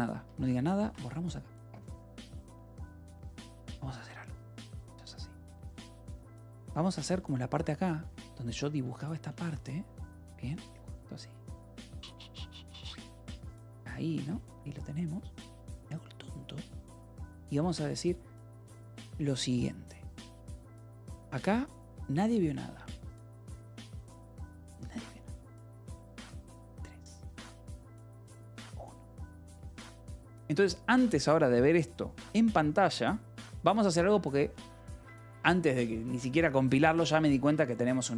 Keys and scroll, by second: 0.0-0.8 typing, 1.3 ctrl+s, 2.8 space, 4.6-5.8 typing, 6.3 ctrl+p, 6.8 Return, 7.2 j, 8.0 u, 9.7 ctrl+s, 11.1 k, 11.4 l, 12.9 u, 14.6 ctrl+s, 33.7 k, 34.0 j.